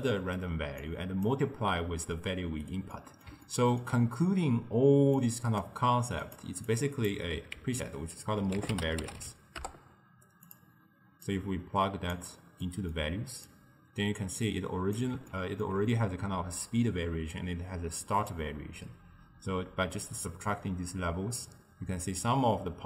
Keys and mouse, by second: 0.9 drag, 2.9-5.2 middle drag, 5.2 click, 6.3 click, 7.7 ctrl+x, 8.6 ctrl+a, 11.3 drag, 12.7-13.5 middle drag, 13.5-15.4 drag, 15.4-18.4 ctrl+middle drag, 18.4-21.4 drag.